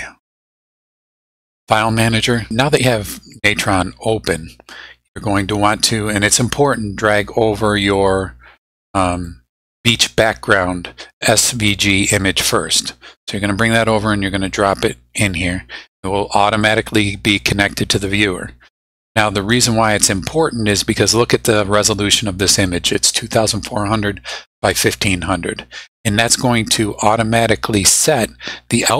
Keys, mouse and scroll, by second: 1.3-2.5 drag, 7.8 click, 9.1 click, 9.8 click, 11.9-14.6 drag, 16.6-17.9 drag, 25.2 scroll down 2.